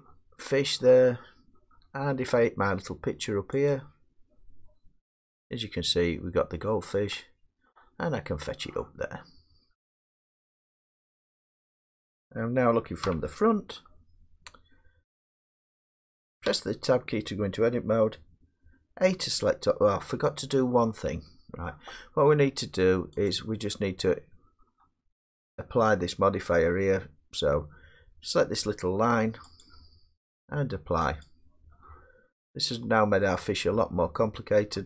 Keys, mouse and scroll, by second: 3.7 click, 7.1 click, 7.9-8.7 scroll down 1, 8.7 scroll down 2, 8.8 middle click, 12.1 middle click, 13.0 1, 16.4 Tab, 19.0 a, 21.1 Tab, 23.3-25.1 drag, 29.6 click, 31.2 click, 32.7 Tab, 34.7 middle click.